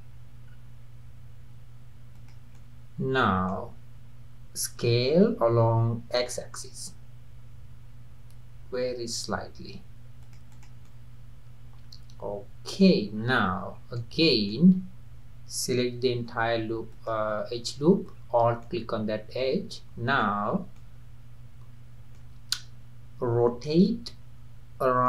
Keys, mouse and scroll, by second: 2.5-4.8 middle drag, 4.8 s, 10.5 click, 10.8-13.2 middle drag, 13.2-13.6 scroll up 4, 13.7 scroll down 1, 14.0-16.9 middle drag, 16.9 alt+click, 18.2-18.6 scroll down 2, 18.6-20.5 middle drag, 20.5-20.8 scroll down 2, 20.8-23.8 middle drag, 23.8 r.